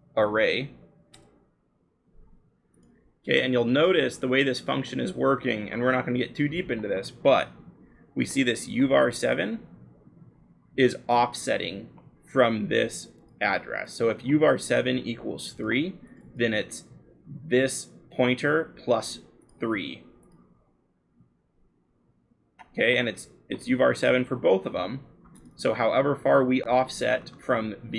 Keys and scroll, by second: 0.0-1.1 typing, 1.4 Return, 3.5-4.9 scroll, 8.9-10.1 scroll, 27.2-27.9 scroll.